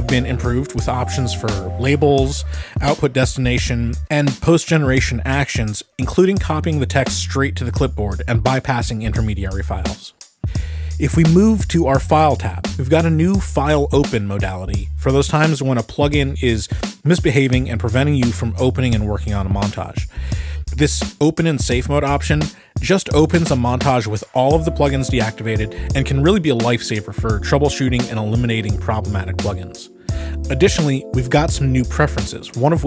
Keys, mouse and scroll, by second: 0.9 click, 4.5 click, 6.6 click, 9.7 click, 10.5 click, 12.0 click, 14.2 click, 31.9 click.